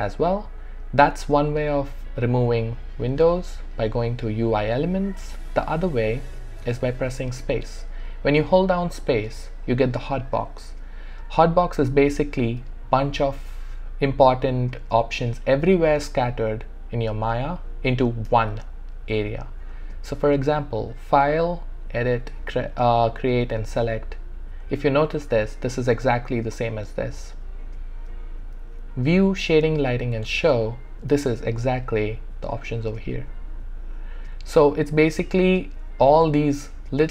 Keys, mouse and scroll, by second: 2.2 click, 6.1 click, 7.4 space, 10.5 space, 11.7 space, 18.3 space, 23.1 space, 26.6 space, 28.1 space, 34.5 space, 35.9 space.